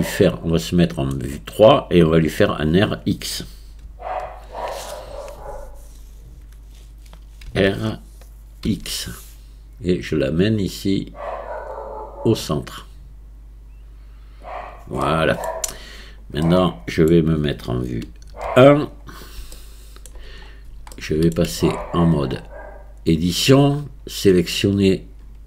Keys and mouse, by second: 3.9 KP_3, 7.5 r, 15.0-15.5 middle drag, 16.5-17.1 middle drag, 18.1 KP_1, 19.6-20.1 shift+middle drag, 20.9-21.3 shift+drag, 21.2 right click, 21.6 Tab.